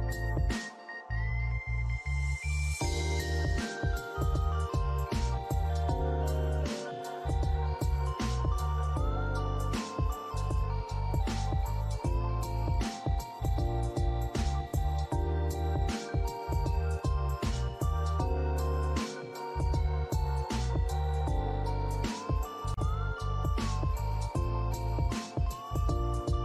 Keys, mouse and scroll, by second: 2.8 alt+click, 6.1 alt+scroll down 1, 7.8-8.2 scroll down 2, 8.0 alt+middle click, 8.3 alt+click, 8.7 alt+middle click, 9.8 double click, 10.3 alt+middle click, 10.7 alt+click, 13.6 alt+middle click, 14.0 alt+click, 14.6 alt+middle click, 17.4 alt+click, 17.8 scroll up 1, 18.2 alt+middle click, 18.6 alt+click, 20.4 typing, 21.1 scroll down 1, 21.8-22.6 typing, 22.2 alt+click, 23.5 alt+middle click, 23.9 alt+click.